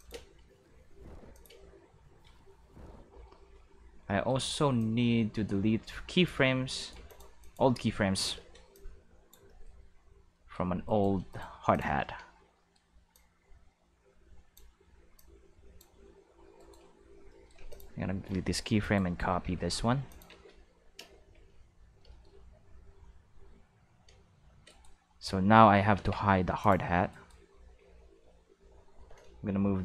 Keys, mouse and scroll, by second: 0.1 space, 1.2 space, 1.3 click, 1.5 space, 2.9 space, 4.0-4.7 middle drag, 4.7-6.2 drag, 6.7 right click, 6.9 x, 7.0 click, 7.4 click, 7.6 space, 8.3 space, 8.7-9.3 drag, 9.4-9.9 middle drag, 10.4 middle click, 10.8 right click, 11.3 right click, 11.5 x, 11.7 click, 13.1-14.5 drag, 15.1 click, 16.5 right click, 17.5 x, 17.7 click, 18.8 right click, 19.4 shift+d, 20.0 click, 20.2 shift+s, 20.9 space, 21.4 q, 24.5 space, 24.6 right click, 25.9 ctrl+Tab, 26.6 click, 27.1 right click, 27.7 q.